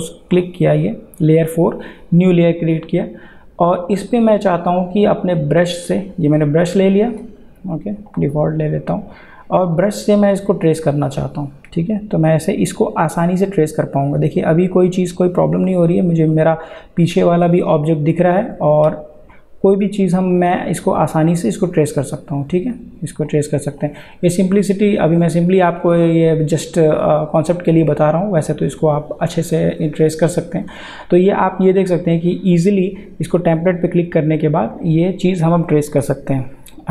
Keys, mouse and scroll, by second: 7.1 click, 11.1-36.9 drag.